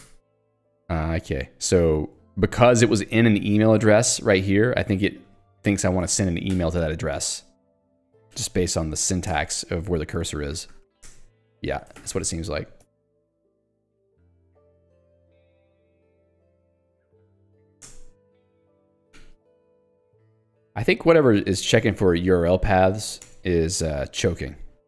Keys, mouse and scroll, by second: 0.2 alt+Return, 1.6-4.5 typing, 6.1 Escape, 6.6 h, 9.4 alt+Return, 10.5 l, 11.2 alt+Return, 12.3 Return, 12.9 Escape, 13.8 click, 14.0 Escape, 14.3 j, 16.6 k, 17.6 h, 18.0 alt+Return, 19.0 Escape, 19.2 j, 20.5 k, 22.3 h, 23.3 alt+Return.